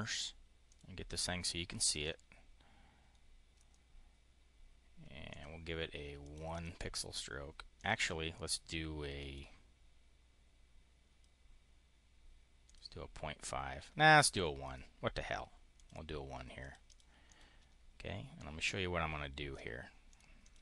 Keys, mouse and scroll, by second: 0.5 click, 1.8 click, 3.5 click, 5.2 click, 6.1 click, 6.4 click, 7.6 click, 9.0 click, 12.5 click, 14.5 click, 15.6 click, 16.4 click, 17.0 click, 18.2-19.5 drag, 20.0 click, 20.2 click.